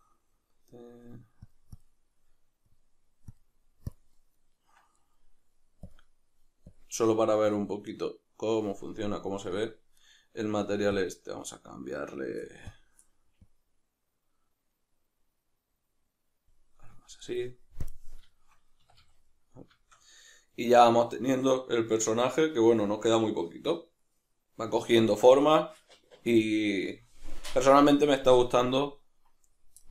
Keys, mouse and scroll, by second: 2.7 click, 3.3-6.0 drag, 6.7 click, 10.0 right click, 11.0 click, 17.9 drag, 18.3-29.9 shift+middle drag, 18.8 a.